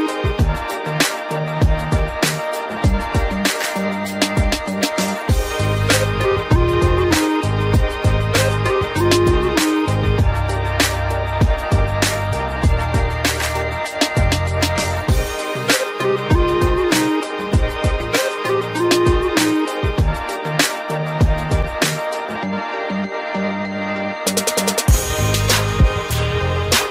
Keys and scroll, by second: 2.0 ctrl+g, 3.0 ctrl+alt+shift+e, 9.3 ctrl+t, 12.6 Return.